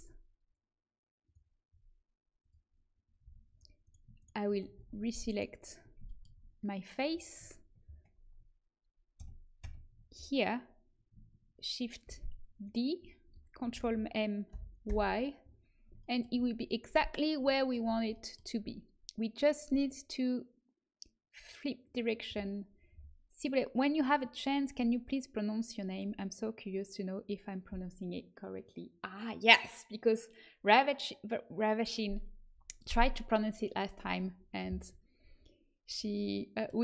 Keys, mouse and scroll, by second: 1.2-3.8 drag, 3.2 a, 3.8 middle click, 4.7 ctrl+z, 9.1 ctrl+KP_Add, 9.6 ctrl+KP_Add, 12.0 shift+d, 13.7 ctrl+m, 19.6-24.6 drag.